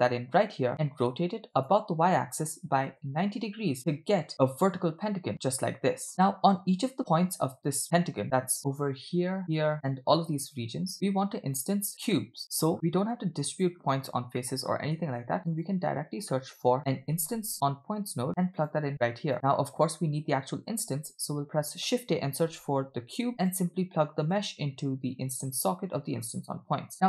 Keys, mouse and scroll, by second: 1.6-3.0 drag, 3.8-4.1 scroll down 2, 4.3-6.1 middle drag, 8.3 click, 8.6 e, 9.0 click, 9.7 click, 9.8 click, 10.6 click, 13.1 click, 14.4 middle click, 15.1 shift+a, 19.0 click, 19.3 middle click, 19.3-19.8 scroll down 2, 20.8 shift+a, 24.4-25.7 drag.